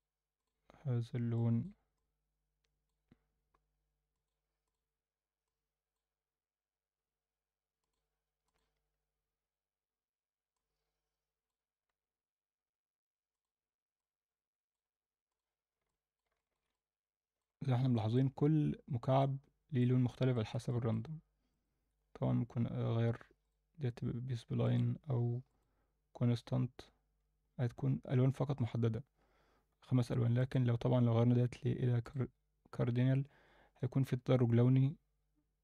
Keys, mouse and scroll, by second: 0.4 drag, 4.1 click, 4.6 click, 7.8 click, 8.4 click, 13.3 click, 15.3 click, 15.9-16.2 middle drag, 16.4 alt+shift+middle click, 16.7-17.4 alt+middle drag, 17.6 scroll up 2, 17.9 middle click, 19.2 click, 20.1 shift+middle drag, 20.7 middle click, 21.5-23.5 drag, 24.6-25.8 drag, 30.4-32.1 drag.